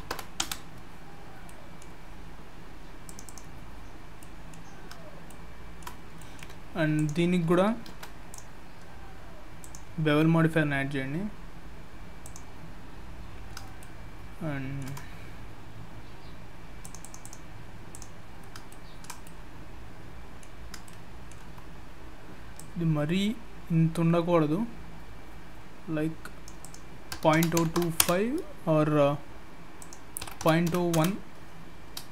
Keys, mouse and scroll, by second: 1.1-1.4 scroll down 4, 1.4 middle click, 3.0 click, 3.3 click, 3.9 scroll down 2, 4.2 middle click, 4.7 scroll up 3, 5.3 shift+middle click, 6.0 scroll down 1, 6.2 middle click, 6.9 click, 7.9 ctrl+a, 9.6 click, 13.8 shift+middle click, 16.8 click, 17.0 click, 17.2 click, 17.9 click, 18.4 scroll up 1, 18.7 shift+middle click, 19.2 middle click, 20.5-20.9 scroll up 2, 22.6 click, 26.6 click, 28.7-29.6 scroll up 1, 29.8 click, 31.9-32.1 scroll up 2.